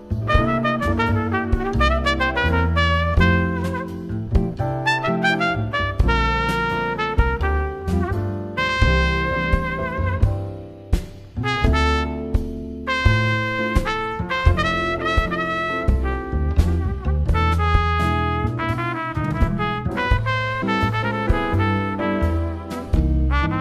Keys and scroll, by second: 2.0 shift+Right, 3.7 shift+Right, 5.7 shift+Left, 6.3 super+-, 22.1 shift+Down.